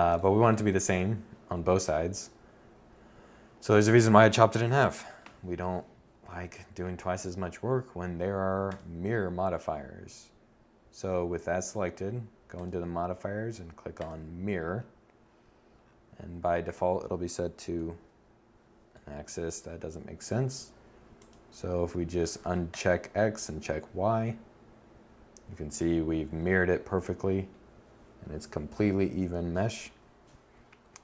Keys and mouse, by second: 17.6 KP_7.